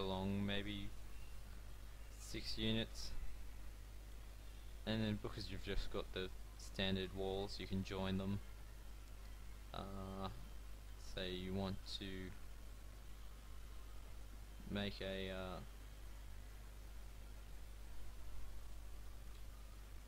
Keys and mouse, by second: 4.0-8.0 drag, 6.6 f, 7.0 a, 9.6 click, 10.6 click, 12.3 KP_1, 13.0 KP_3, 15.3 e, 16.6 e, 19.0 e.